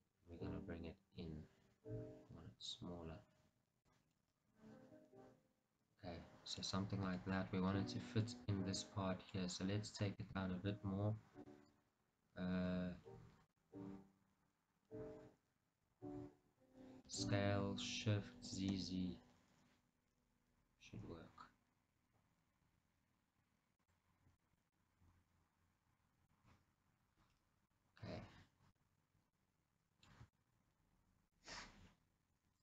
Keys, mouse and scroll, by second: 4.3-9.4 middle drag, 6.9-7.3 scroll, 7.6 scroll, 16.1-17.2 scroll, 17.2 s, 23.9 click, 24.2 scroll, 24.9 middle click, 26.0 middle click, 26.7-27.4 scroll, 27.4 middle click, 27.9 scroll, 28.9-32.6 middle drag, 31.2-31.5 scroll.